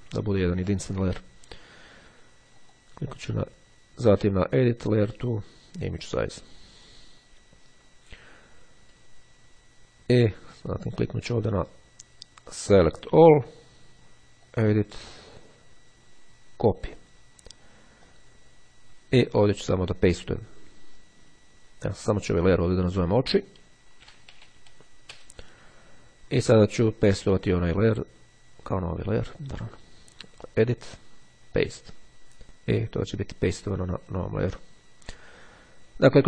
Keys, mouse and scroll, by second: 0.4-1.0 ctrl+scroll down 2, 2.7 click, 5.8 click, 12.6 click, 14.5 click, 16.8-17.8 drag, 18.2 click, 22.3 click, 23.4-24.4 typing, 30.6 click, 31.6 click, 34.0 click, 35.6-36.1 ctrl+scroll down 2.